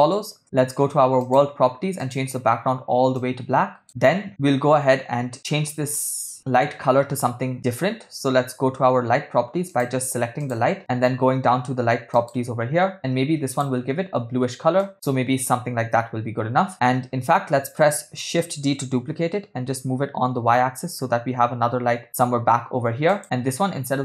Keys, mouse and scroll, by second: 0.5 space, 1.2 click, 2.0-2.3 drag, 9.7 click, 10.5 click, 12.2 click, 13.5 click, 18.8 shift+d.